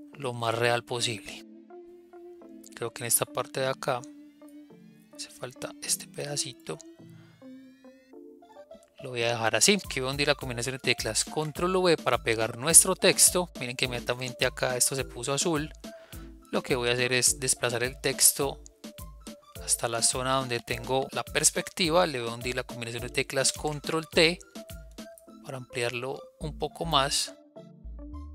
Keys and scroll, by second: 11.1 ctrl+v, 23.5 ctrl+t.